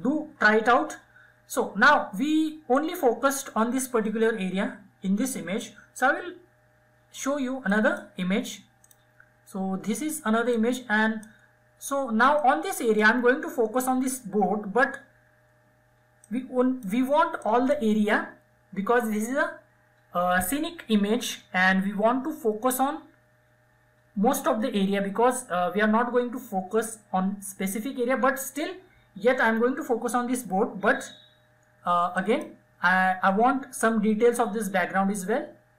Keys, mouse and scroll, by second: 1.9-4.8 drag, 6.9-15.4 drag, 15.4 click, 31.4 click.